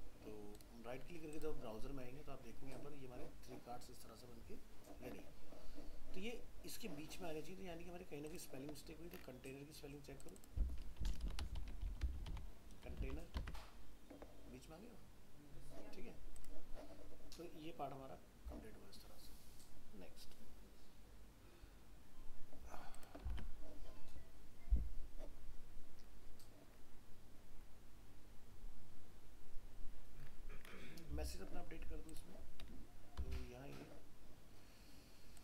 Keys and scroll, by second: 13.0 ctrl+s, 13.4 alt+Tab, 23.3 alt+Tab, 33.3 alt+Tab.